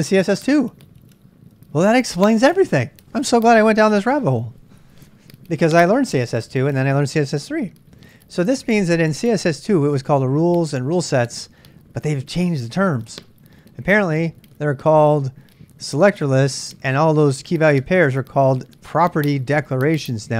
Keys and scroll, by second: 0.0-0.7 typing.